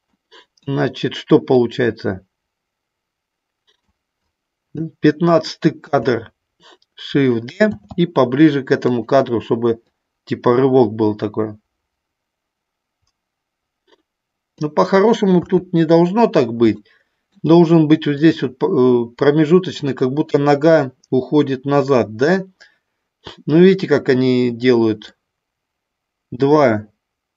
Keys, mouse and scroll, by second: 0.0 middle click, 1.7-3.9 drag, 4.2 click, 5.8 a, 7.7 shift+d, 8.9 click, 9.8-14.5 drag, 15.3 KP_3, 16.6 shift+middle click, 18.3 click, 25.2-27.3 drag.